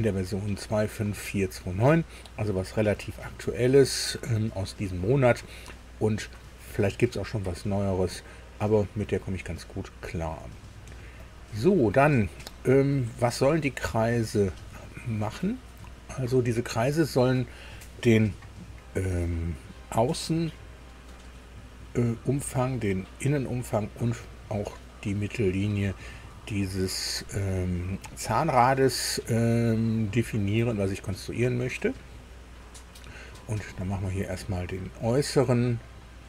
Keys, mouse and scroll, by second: 11.2 click, 13.8 click, 33.6 click, 35.5 click.